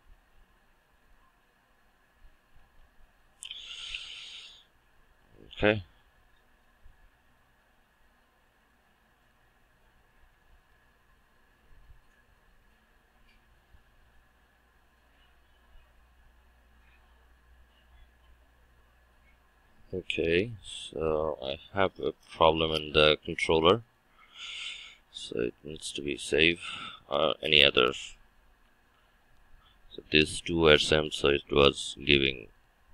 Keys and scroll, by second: 7.4 shift+F9, 32.6 shift+F9.